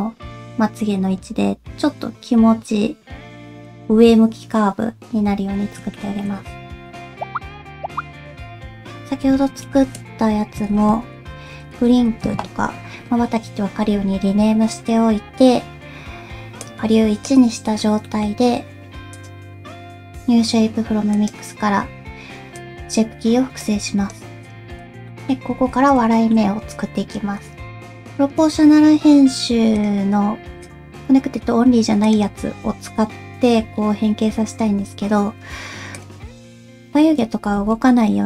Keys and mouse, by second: 6.0 shift+middle click, 6.8 Tab, 8.4-12.2 drag, 16.6 click, 18.0 middle click, 19.2-21.3 drag, 22.5 click, 23.7 click, 24.4 click, 25.1 middle click, 25.5 Tab, 26.1 shift+middle click, 27.7 click, 27.8 alt+a, 29.8-31.5 drag, 32.0 click, 32.6 g, 35.9 click, 37.5 alt+a.